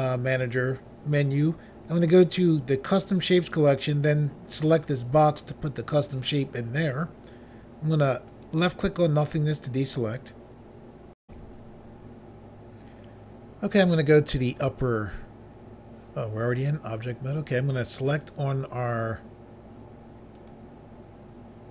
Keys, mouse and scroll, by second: 4.5 click, 8.3 click, 11.2 Pause, 18.1 click, 20.3 click.